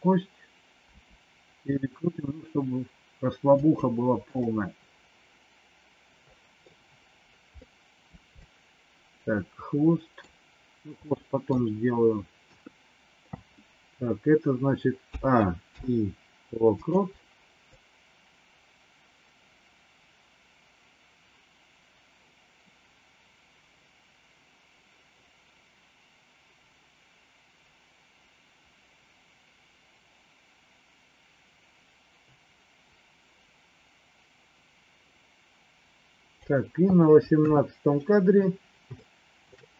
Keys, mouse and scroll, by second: 0.9 r, 4.4-6.7 middle drag, 7.7 middle click, 8.3-10.2 middle drag, 11.0 middle click, 12.4 KP_3, 15.0 a, 15.6 i, 17.8-36.4 drag, 37.3 KP_3, 39.0 shift+middle click.